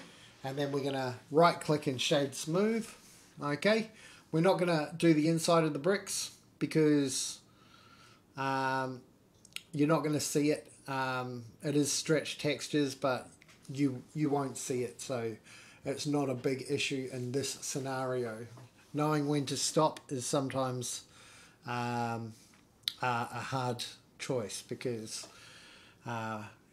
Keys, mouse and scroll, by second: 2.4 Tab, 2.9 middle click, 3.4 scroll up 2, 3.6 middle click, 4.4-5.4 right drag, 6.1 middle click, 6.4 right click, 6.9 scroll down 3, 7.0 middle click, 7.9-9.6 drag, 10.5-11.7 middle drag, 11.9 middle click, 12.1-12.9 scroll up 3, 12.4 middle click, 13.0 shift+middle click, 13.3 scroll down 1, 13.4-14.4 middle drag, 14.6 shift+middle drag, 16.0 click, 16.3-16.9 scroll down 2, 16.9-18.4 middle drag, 19.3 click, 19.6 middle click, 21.0 click, 21.4 middle click, 21.9 shift+click, 22.5 click, 22.9 Tab, 24.1 KP_7, 24.8-25.3 scroll up 3, 25.3 shift+middle click, 26.0 scroll up 1, 26.3 shift+middle click.